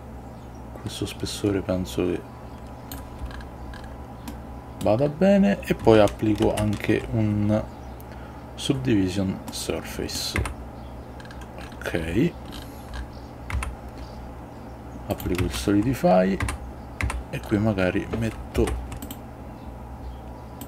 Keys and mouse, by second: 4.4-5.0 middle drag, 6.5 ctrl+2, 9.7-10.3 middle drag, 10.5 Tab, 13.7 Tab, 15.2 click, 15.5 ctrl+a, 16.5 Tab, 17.1 Tab, 18.7 ctrl+r.